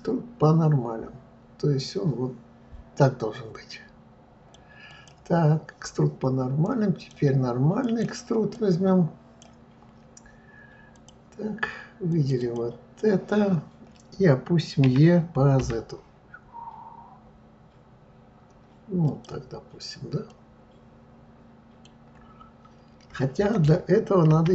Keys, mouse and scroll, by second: 4.9 click, 6.6-8.0 drag, 8.5-11.0 drag, 12.1 click, 12.4 click, 14.8 e, 20.3-23.3 middle drag, 24.3 ctrl+z.